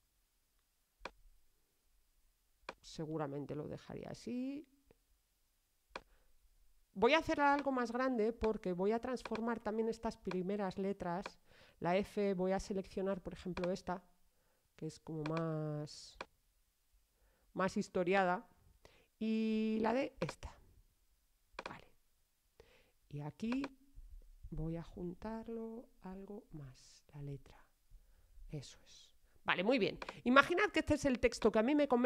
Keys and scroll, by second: 25.9 alt+Left.